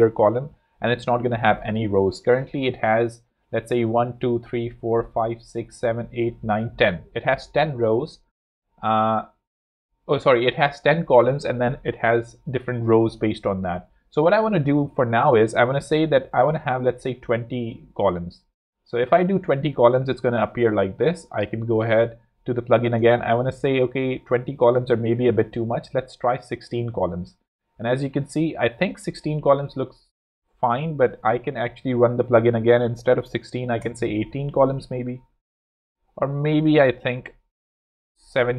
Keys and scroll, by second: 14.5 super+2, 14.6 0, 21.3 shift+super+p, 22.4-23.3 typing, 24.6 super+i, 24.9 6, 26.3 Return, 30.5 shift+super+p, 33.0-33.8 typing, 34.7 super+Return, 35.3 super+z, 37.6 shift+super+p, 38.3 shift+super+i.